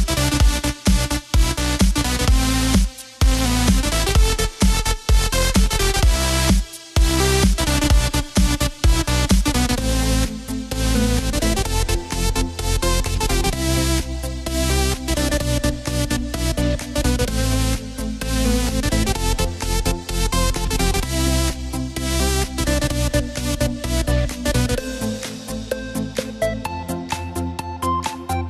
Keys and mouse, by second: 1.8 click, 3.6 s, 5.3 click, 11.0 e, 14.3 click, 17.0 s, 19.7 click, 21.8 e, 26.0 click.